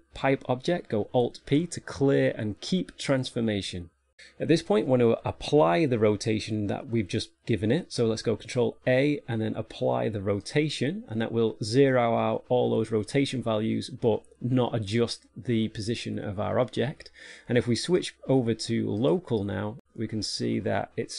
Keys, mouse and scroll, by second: 1.6 alt+p, 9.2 ctrl+a, 19.5 click.